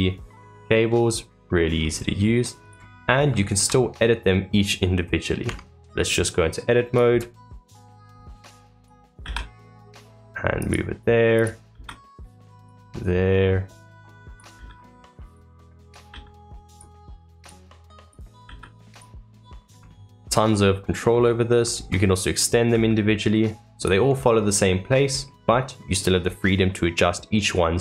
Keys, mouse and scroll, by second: 0.0-0.5 scroll up 2, 0.5-1.7 middle drag, 1.7-2.6 scroll down 3, 2.6 click, 2.9 scroll up 2, 3.3-5.4 shift+middle drag, 5.4 Tab, 12.8-14.3 middle drag, 14.3-15.5 drag, 17.3-19.2 drag, 19.2-20.3 middle drag, 20.3-20.6 scroll down 2, 20.6-21.7 middle drag, 21.7-22.7 scroll up 2, 24.1 middle click, 24.8-25.2 scroll down 3, 25.2 middle click, 25.5-27.8 drag.